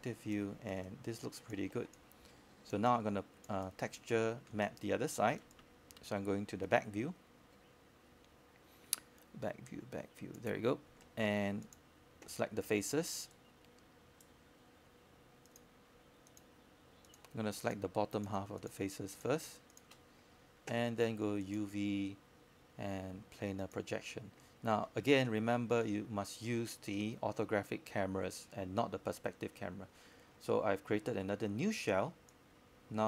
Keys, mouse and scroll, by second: 2.2 click, 3.6 e, 4.6-7.6 drag, 8.2 w, 8.9-10.6 drag, 11.2 e, 11.2 e, 12.0-14.3 drag, 14.3-15.0 scroll down 1, 15.0 right click, 15.9 click, 19.5 space, 19.6 space, 19.7 click, 20.7 alt+click, 21.2 scroll down 1, 21.4 click, 22.7 alt+click, 23.6 alt+click, 24.4 alt+click, 25.0 alt+middle click, 26.2 alt+space, 26.3-31.6 drag, 31.9 alt+middle click, 32.5 click.